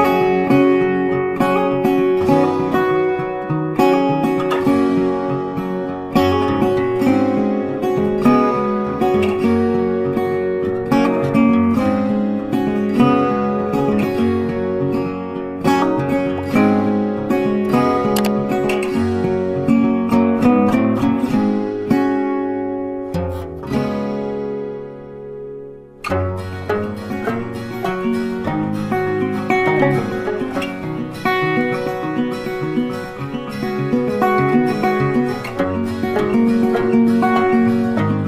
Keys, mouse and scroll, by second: 1.2 alt+click, 3.1 alt+click, 3.7 ctrl+z, 4.6 space, 5.2 ctrl+space, 5.3 ctrl+click, 5.4 ctrl+space, 7.2 double click, 8.6-9.3 alt+scroll up 1, 9.3 double click, 9.8 alt+scroll down 1, 10.0 space, 10.2 ctrl+click, 14.4 double click, 15.3 space, 15.6 ctrl+click, 16.8 ctrl+click, 17.9 double click, 18.8 ctrl+click, 19.0 ctrl+click, 19.5 double click, 21.5 ctrl+space, 21.6 ctrl+click, 21.8 ctrl+space, 23.3 space, 28.7 space, 28.8 ctrl+click, 32.0 ctrl+click, 36.9 ctrl+click.